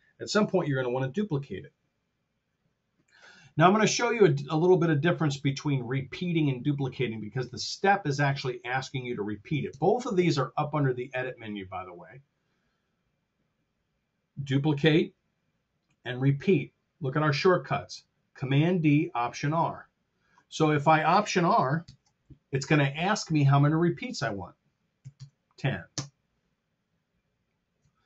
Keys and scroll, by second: 3.6 super+Tab, 9.6 super+Tab, 21.7 alt+r, 24.9 KP_1, 25.1 KP_0, 25.8 Return.